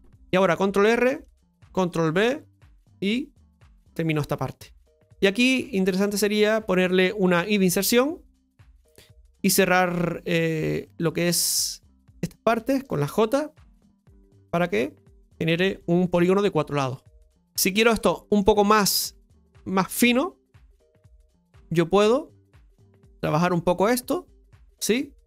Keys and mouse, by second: 4.2 middle click, 4.9 right click, 6.0 click, 6.4 right click, 10.3 click, 10.8 middle click, 11.9 right click, 12.7 shift+right click, 13.5 j, 14.3 right click, 15.1 shift+right click, 16.1 j, 16.9 middle click, 18.0 shift+middle click, 19.0 Tab.